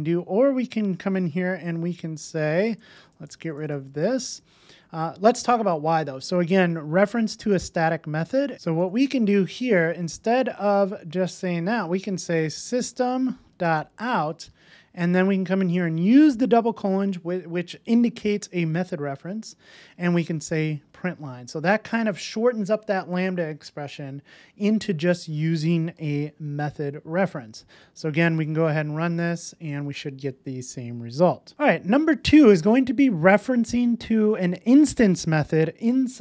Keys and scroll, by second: 2.7 alt+shift+Left, 8.5 alt+shift+Left, 10.3 alt+shift+Right, 20.0 Return, 20.7 super+s, 26.0 super+s, 31.5 super+v.